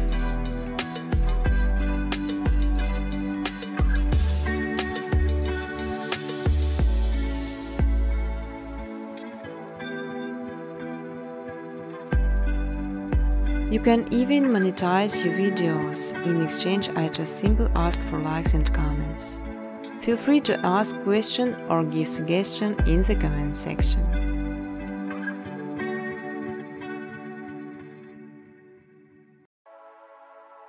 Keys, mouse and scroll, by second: 1.8 click, 3.6 click, 4.5 0, 4.9 click, 5.7-6.5 typing, 7.3 Tab, 7.8-10.8 typing, 9.2 Tab, 12.7 Tab, 12.7-16.6 typing, 15.9 click, 18.4 space, 18.8 space, 19.8 space, 20.2 middle click, 20.2 middle click, 20.9 middle click, 21.0 click, 21.0 scroll, 21.4 click, 22.0 ctrl+c, 23.2 ctrl+d, 23.2 scroll, 24.3 click, 24.8 scroll, 25.9 click, 26.6 click.